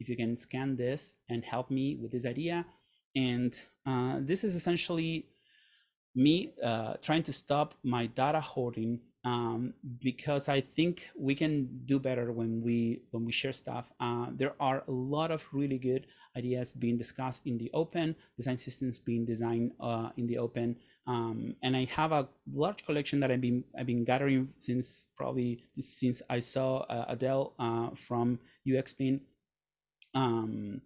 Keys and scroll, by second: 4.3 super+..